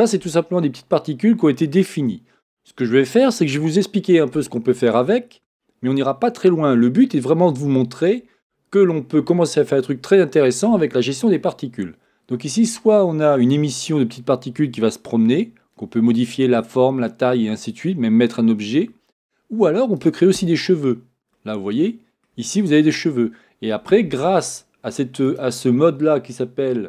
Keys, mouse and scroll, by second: 20.0 click, 20.6-21.3 scroll down 1, 21.3-25.3 middle drag, 25.3-26.8 drag.